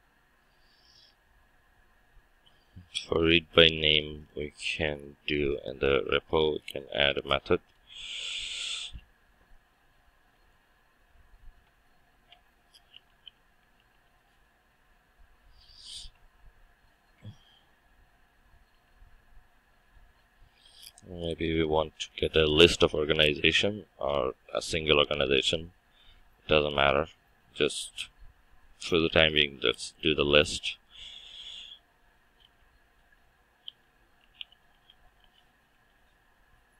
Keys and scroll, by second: 32.6 Return.